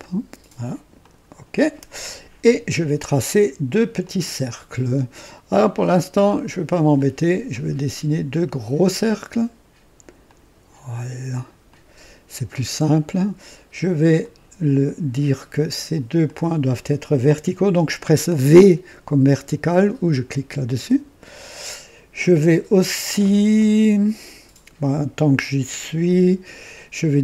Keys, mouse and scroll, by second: 0.9 click, 3.9 click, 6.9 click, 8.7 click, 10.2 click, 11.6 click, 12.5 right click, 14.1 click, 16.2 click, 20.7 v.